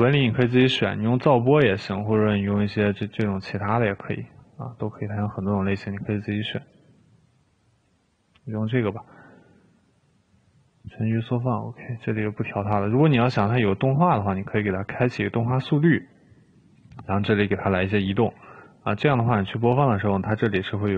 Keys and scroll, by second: 15.0 3, 17.6-18.4 typing.